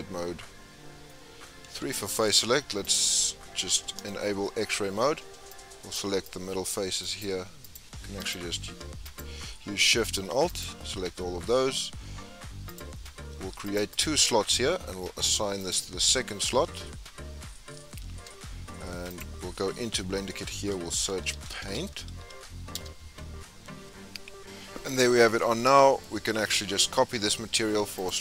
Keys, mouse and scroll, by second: 2.9 click, 3.4-4.1 scroll up 3, 4.1 shift+middle click, 4.8-5.9 scroll up 2, 5.9 click, 7.0 click, 7.7 alt+click, 8.3 alt+click, 9.2 alt+shift+click, 10.1 alt+shift+click, 10.6 alt+shift+click, 11.1 scroll down 5, 13.8-17.6 drag, 17.6-18.1 scroll down 2, 18.1 Tab, 22.7 click, 24.9 scroll up 4, 25.2 scroll down 6, 25.5-26.0 scroll up 3, 26.0-26.4 middle drag, 26.4-28.2 scroll up 2.